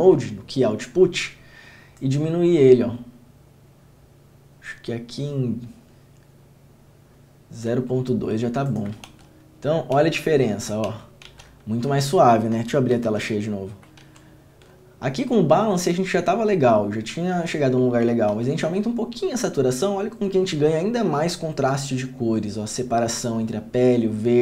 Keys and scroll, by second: 9.2 ctrl+d, 10.1 ctrl+d, 11.4 ctrl+d, 13.2 ctrl+f, 18.5 ctrl+d.